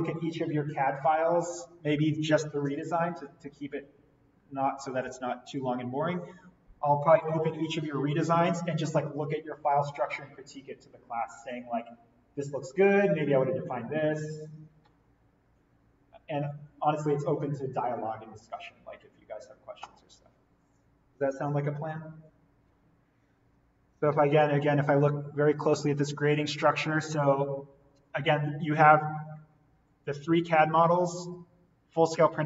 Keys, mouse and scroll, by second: 25.1-25.6 scroll up 1, 28.9-29.4 scroll down 1, 30.3-32.4 scroll down 1.